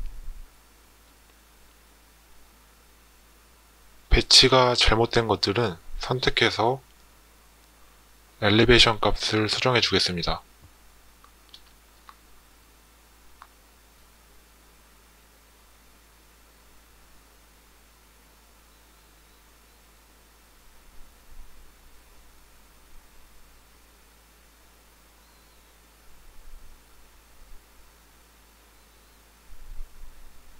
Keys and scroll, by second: 5.9 Tab, 9.4 0, 9.9 Return.